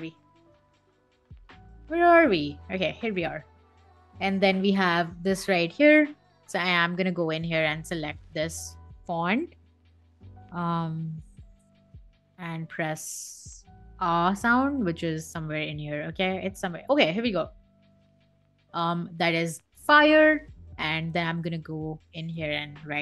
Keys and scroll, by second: 18.9 Escape, 22.8 space.